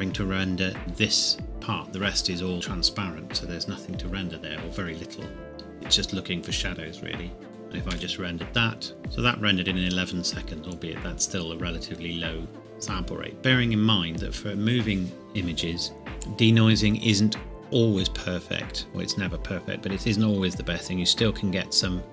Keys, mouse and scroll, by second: 7.5-7.9 scroll up 2, 7.9 F12, 10.7 scroll up 1, 11.6-12.1 scroll down 1, 15.7-16.2 scroll down 1, 16.7-17.9 scroll down 1, 17.9-18.3 scroll up 1.